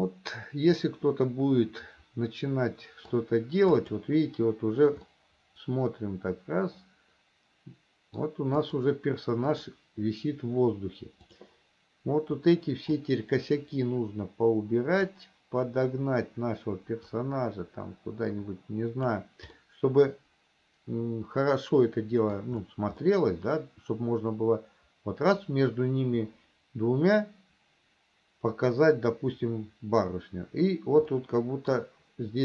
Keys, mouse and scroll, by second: 4.1 click, 5.3-8.7 middle drag, 9.0 click, 9.9 click, 11.5 click, 13.1-15.6 drag, 17.3-19.4 drag, 19.8-22.8 middle drag, 23.4-25.7 middle drag, 31.4 middle click.